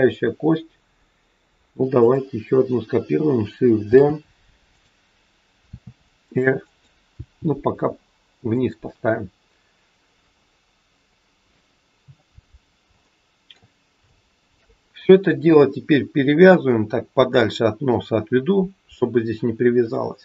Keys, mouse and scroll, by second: 2.0 click, 3.8 shift+d, 5.6 r, 7.1 g, 12.5 scroll up 1, 13.1 shift+middle click, 14.0 shift+middle click, 15.1-16.4 scroll down 3, 16.4 click.